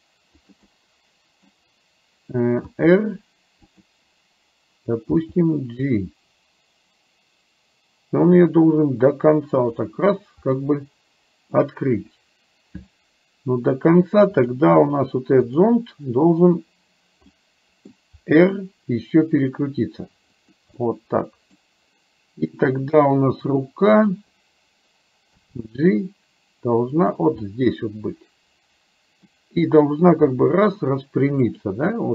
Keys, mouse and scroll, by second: 0.8-2.8 middle drag, 0.8-1.5 scroll up 1, 1.5-2.8 scroll down 1, 2.8 r, 5.3 g, 10.6-11.6 middle drag, 14.5 click, 15.6 click, 17.4 middle click, 18.3 r, 20.9 middle click, 24.1 click, 25.5 g, 27.5-29.4 middle drag, 30.3 r, 32.0 middle click.